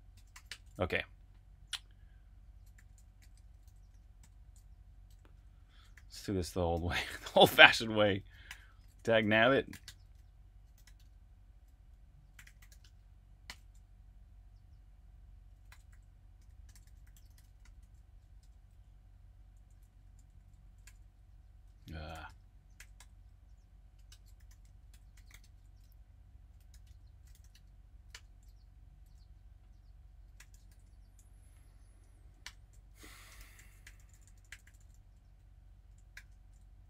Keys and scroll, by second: 0.0-0.8 typing, 2.5-4.5 typing, 5.9 ;, 8.2-13.4 typing, 15.4-28.0 typing, 30.1-36.1 typing, 31.8 Up.